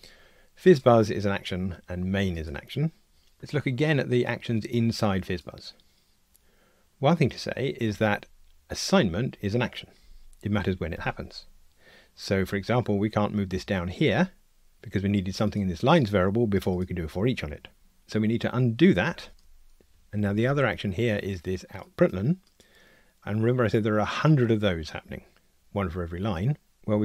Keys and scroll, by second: 13.5 alt+shift+Down, 19.1 super+z.